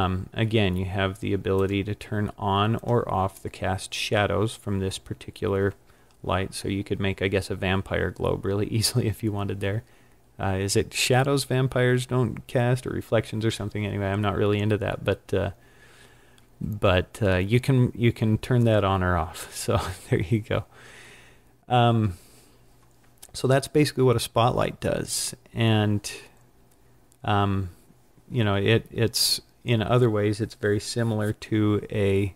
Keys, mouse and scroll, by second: 1.7 click, 2.8 click.